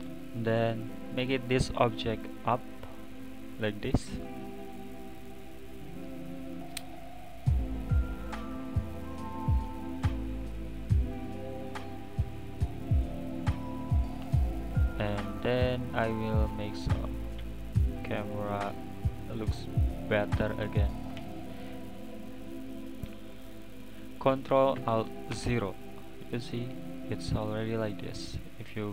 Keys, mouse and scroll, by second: 0.0 click, 1.2-2.4 drag, 4.4 click, 4.6-5.7 middle drag, 5.7 click, 6.3 scroll down 5, 8.2 click, 8.9 click, 9.7 scroll up 2, 11.0 drag, 11.8 drag, 12.4-14.0 middle drag, 14.0 click, 14.2-14.7 middle drag, 14.7 scroll down 3, 14.9-17.0 middle drag, 17.0 click, 18.4 middle click, 19.2 scroll down 2, 19.4-22.5 middle drag, 25.3 KP_0, 26.6 click, 27.4-28.2 scroll up 1, 28.2 click, 28.8 click.